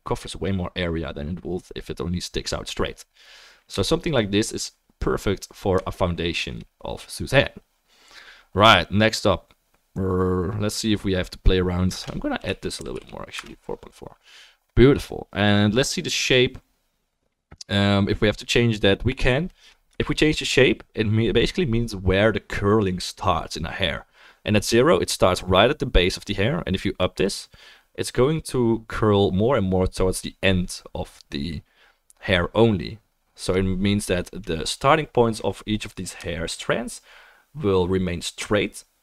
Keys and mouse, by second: 19.9-39.0 shift+middle drag, 29.0-34.8 drag, 29.0-34.8 right drag.